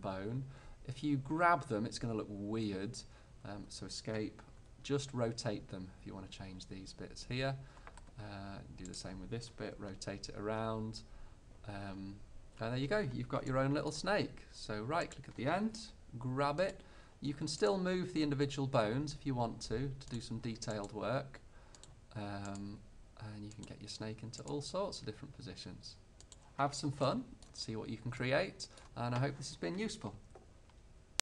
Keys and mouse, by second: 4.7 r, 9.0-10.8 right drag, 9.9 r, 10.8 middle click, 13.0-16.8 right drag, 15.8 g, 16.8 middle click, 17.7-18.7 drag, 18.3 g, 20.8-22.0 drag, 21.1 g, 22.8 click, 22.8 g, 24.3 click, 24.7 g, 25.5 click, 26.5-28.5 drag.